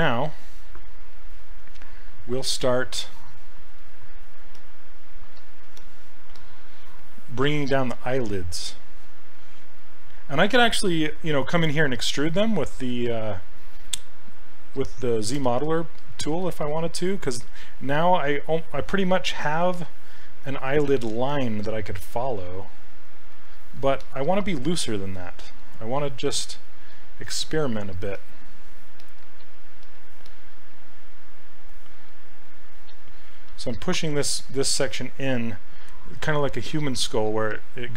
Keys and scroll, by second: 8.0 s, 20.5 s, 21.3 s, 26.2 s, 30.2-31.2 typing.